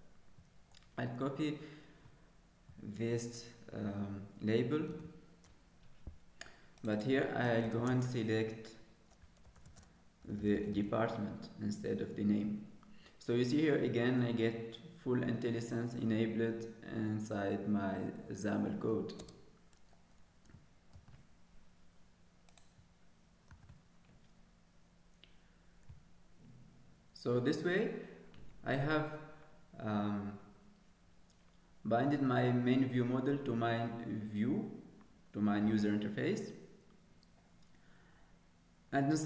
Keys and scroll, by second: 5.5 ctrl+d, 7.8 ctrl+space, 21.3 ctrl+s, 23.2 ctrl+s, 24.0 ctrl+s.